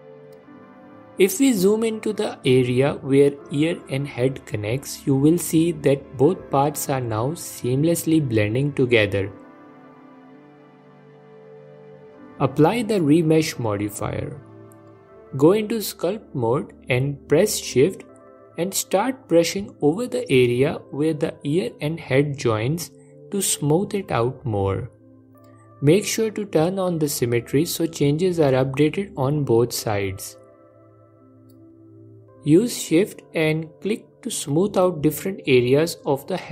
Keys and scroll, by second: 19.6 ctrl+Tab, 22.5 g, 23.5 f.